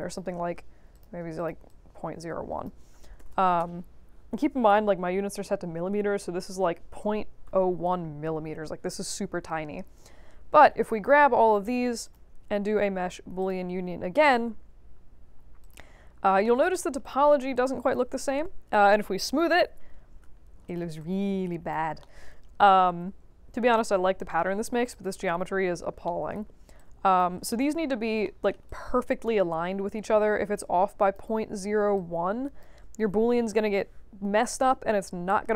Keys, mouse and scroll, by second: 0.9 click, 1.3 click, 1.6 click, 3.1 BackSpace, 3.5 Return, 10.2 q, 10.5 click, 12.0 click, 13.4 click, 15.6 click, 16.1 alt+middle click, 17.0 click, 17.5 alt+click, 19.8 middle click, 20.6 click, 20.9 alt+click, 22.0 alt+middle click, 22.3 alt+middle click, 22.6-23.7 alt+drag, 24.2 alt+middle click, 24.5 alt+middle click, 24.9 click, 25.3 1, 26.0 alt+middle click, 26.4 alt+middle click, 26.7 alt+click, 27.5 alt+middle click, 28.2 alt+middle click, 28.6 alt+click, 29.5 middle click, 30.5 alt+click, 31.9 alt+click.